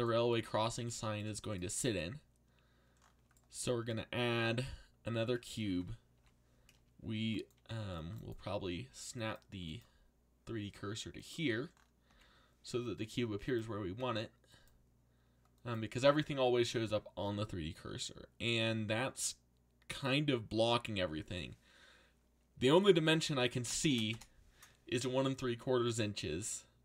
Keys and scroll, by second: 6.1 z, 7.5 c, 12.1 z, 22.5-24.3 typing.